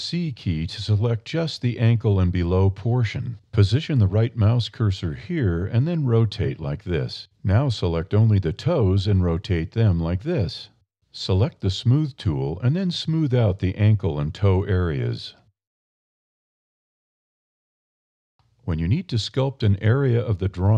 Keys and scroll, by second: 1.0 c, 4.4 r, 6.3 a, 7.0 c, 10.5 r, 11.3 a, 12.8 d, 13.0 e, 14.2 e.